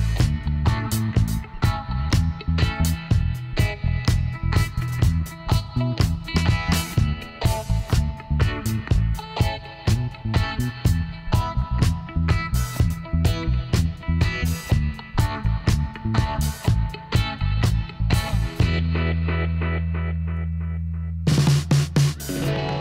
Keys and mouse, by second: 0.0-4.6 middle drag, 3.3 w, 8.4-11.1 middle drag, 8.7 Tab, 11.0 z, 11.5 z, 12.0-13.7 middle drag, 14.6 KP_1, 18.3-20.0 drag, 20.0 m, 22.6-22.8 drag.